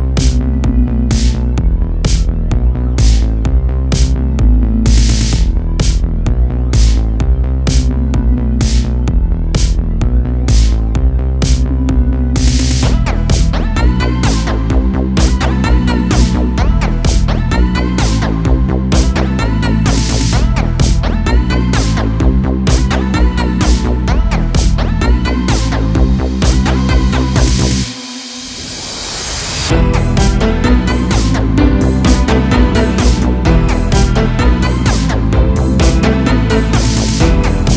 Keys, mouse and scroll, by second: 0.5 click, 1.8 click, 2.5 click, 10.9 click, 17.9 a, 18.1 a, 19.1 a, 19.3 a, 19.6-20.6 scroll up 1, 20.6-22.1 scroll down 1, 22.1-22.7 scroll down 1, 22.7 scroll down 1, 22.8 shift+`, 27.0 a, 27.2 a, 27.6 click, 29.1 click, 32.8 click, 33.5 click, 35.8-36.5 drag.